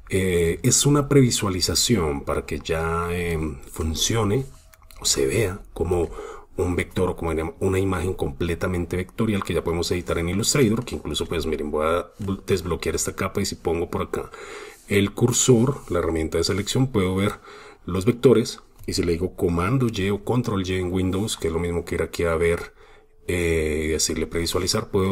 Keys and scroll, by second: 2.9 super+space, 5.3 super+space, 5.9 super+space, 19.6 super+y.